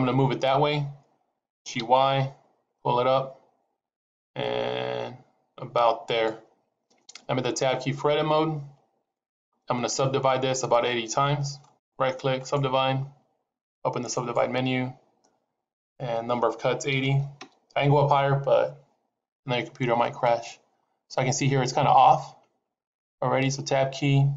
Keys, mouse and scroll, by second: 1.4 g, 8.5 Tab, 11.5 right click, 14.2 right click, 14.2 click, 15.6 click, 23.3 Tab.